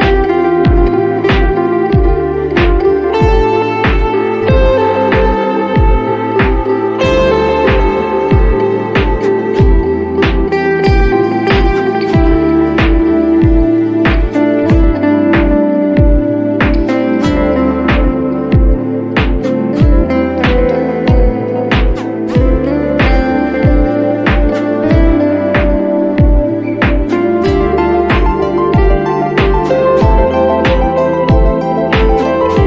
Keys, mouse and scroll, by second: 2.7 click, 5.3 click, 8.4 click, 10.0 click, 12.3 right click, 12.6 click, 13.6 ctrl+t, 13.7-15.8 drag, 16.0 click, 17.2 right click, 17.3 click, 17.9 ctrl+t, 18.1 click, 20.0 right click, 20.1 click, 21.5 click, 21.7 ctrl+d, 21.9 click, 23.9 click, 26.4-26.9 scroll up 1, 27.2 [, 28.3 click, 30.2 [, 31.3 click.